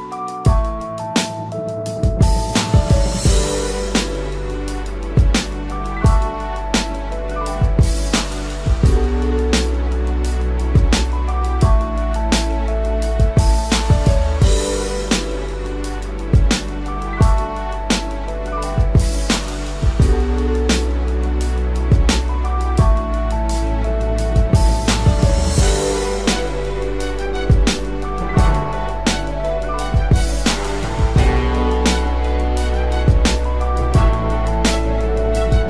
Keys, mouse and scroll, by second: 8.9 double click, 18.5 double click, 30.3 double click, 34.2-35.3 typing.